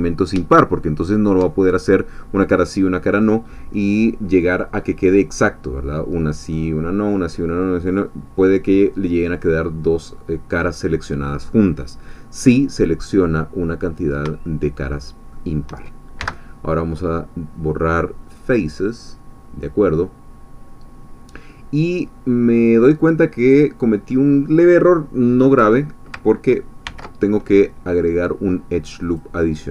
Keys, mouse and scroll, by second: 12.2-13.0 scroll up 2, 13.0-13.4 scroll down 2, 13.4-14.4 middle drag, 16.2 x, 18.3 click, 21.9-26.1 drag, 26.8 ctrl+r, 29.0 click.